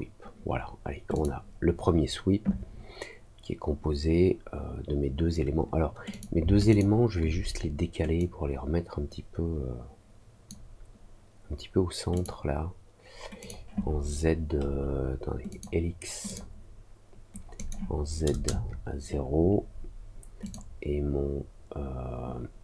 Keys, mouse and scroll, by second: 1.1 click, 6.0 click, 6.6 shift+click, 8.1-10.4 drag, 12.1 click, 13.3 click, 15.4 click, 16.2 click, 17.5 click, 20.4 click.